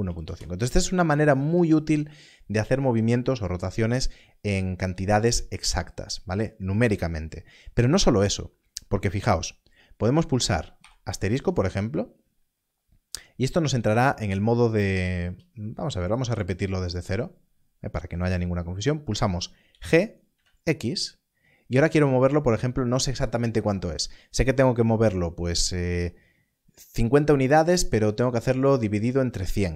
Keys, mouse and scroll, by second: 0.1 BackSpace, 0.2 BackSpace, 9.9 BackSpace, 10.8 shift++, 14.9 BackSpace, 15.2 BackSpace, 16.9 right click, 19.6 right click, 19.7 g, 20.3 x.